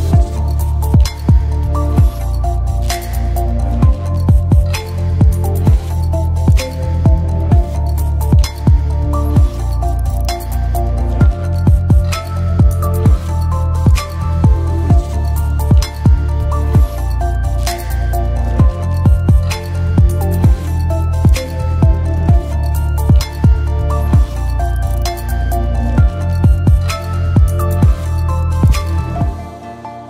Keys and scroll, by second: 5.6 space, 11.0-11.9 typing.